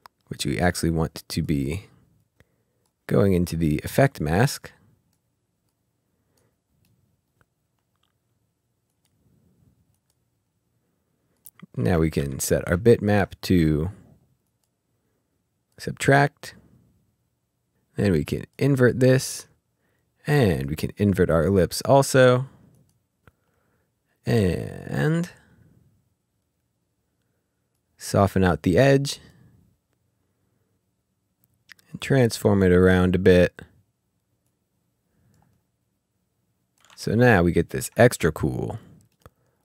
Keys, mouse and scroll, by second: 0.6 click, 3.2 middle click, 4.2 click, 6.8 middle click, 8.9 click, 11.5 click, 12.8-13.3 ctrl+scroll down 2, 14.4 click, 18.3 click, 20.5 click, 26.6 click, 31.6 click, 35.4 click, 37.0-37.4 ctrl+scroll down 2, 37.7 ctrl+scroll up 1, 39.1 middle click.